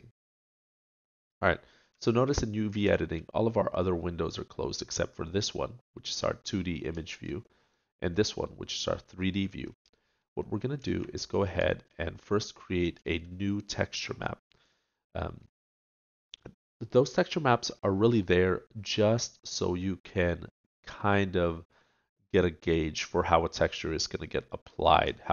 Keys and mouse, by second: 1.1 middle click, 7.0 middle click, 8.3-12.6 middle drag, 13.4 middle click.